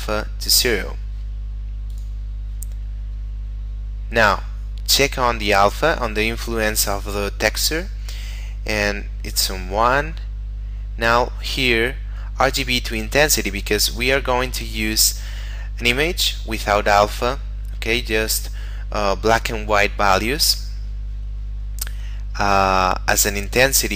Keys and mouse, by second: 1.9 click, 2.8 middle click, 4.2 click, 5.9 middle click, 13.9 click, 14.5 middle click, 20.7 middle click.